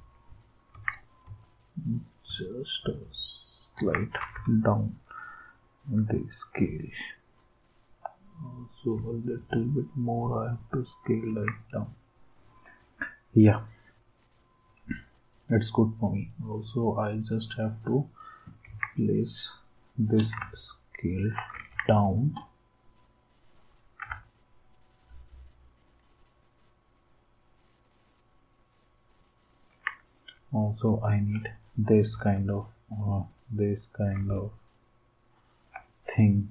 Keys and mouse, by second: 0.7 ctrl+s, 1.2 Left, 1.2 Right, 1.2 s, 3.8 ctrl+s, 4.3 Up, 5.9 Left, 11.3 ctrl+s, 18.7 ctrl+s, 21.5 ctrl+s, 34.2 alt+Tab.